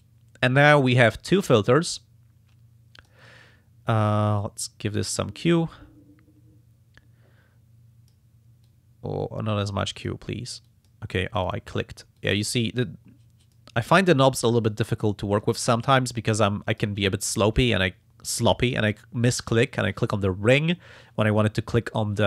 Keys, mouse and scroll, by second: 1.0-3.4 drag, 4.4-8.3 drag, 8.6-10.2 drag, 10.7 click, 11.4 click, 12.2 click, 13.4 click, 14.1 click, 15.4-17.0 drag.